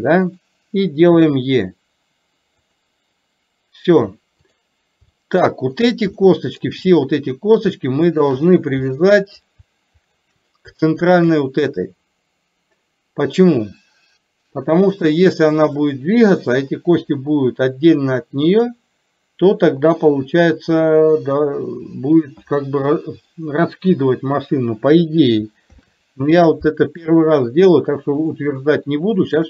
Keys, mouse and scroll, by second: 1.3 e, 4.6 click, 5.2 shift+middle click, 6.2 shift+middle click, 8.2 shift+click, 9.0 middle click, 10.1 shift+click, 11.1 shift+click, 26.0 ctrl+p, 28.2 click, 29.3 shift+click.